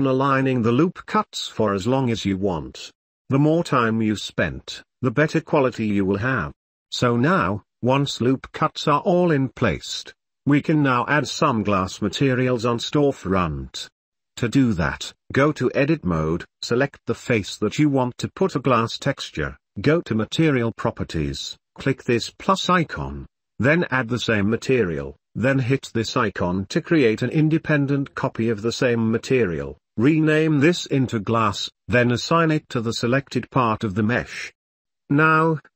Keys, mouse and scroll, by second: 0.8 click, 1.7 ctrl+s, 2.4 3, 4.0 middle click, 5.3 ctrl+r, 7.7 shift+middle click, 8.1 middle click, 9.5 3, 13.5-15.6 shift+middle drag, 16.5 3, 17.5 ctrl+s, 21.1 click, 27.7-28.1 drag, 29.6 click, 29.8-31.4 drag, 31.4 s, 33.6 click, 35.0 click.